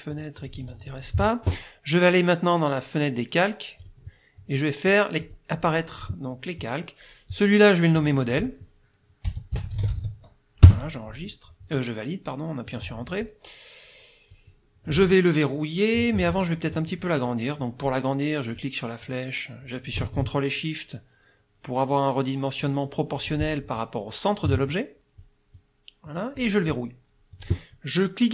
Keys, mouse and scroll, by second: 0.1 click, 3.8 click, 5.3 click, 8.0 click, 9.1-10.5 typing, 10.7 Return, 12.7 click, 14.3 click, 16.2 click, 18.6-23.5 drag, 24.7 ctrl+shift+click, 25.6-26.6 drag, 27.3 click.